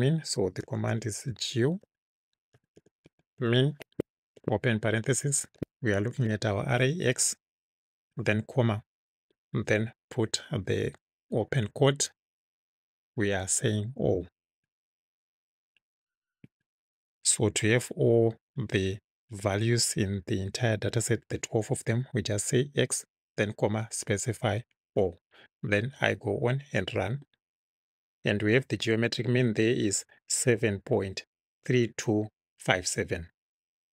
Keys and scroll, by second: 0.7-4.4 typing, 6.1 shift+x, 8.1 ', 8.6 ,, 11.8 ', 14.7 Right, 16.5 Right, 17.2 Right.